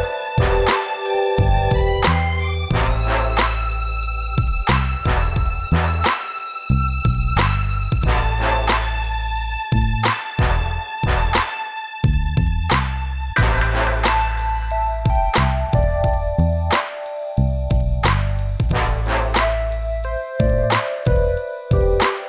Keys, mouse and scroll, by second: 1.6 click, 1.6 click, 1.9 click, 2.0 double click, 3.6 click, 6.6 click, 7.8 click, 10.6 click, 11.6 click, 14.0 click, 14.1 click, 20.8 click.